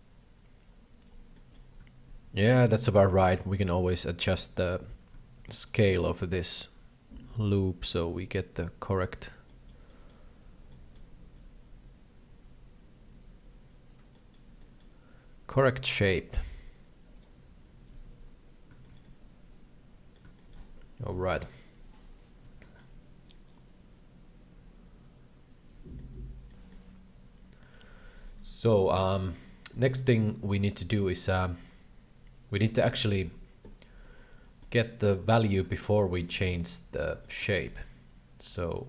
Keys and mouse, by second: 1.3 shift+middle click, 2.9 middle click, 3.3 middle click, 4.1 middle click, 4.5 middle click, 5.4 middle click, 6.3-9.2 shift+drag, 9.4 shift+middle click, 9.8 shift+middle click, 10.8 shift+middle click, 11.4-13.8 shift+drag, 14.3 shift+middle click, 14.6 shift+middle click, 15.6-17.6 shift+drag, 17.6 shift+middle click, 18.0 KP_3, 18.8 shift+middle click, 19.1-20.1 middle drag, 20.4 shift+middle click, 21.2 KP_7, 22.7 shift+middle click, 23.2-25.7 shift+drag, 26.0 middle click, 32.8 shift+middle click, 34.1 shift+middle click, 35.8-37.2 shift+middle drag, 37.5 shift+middle click, 38.3 click.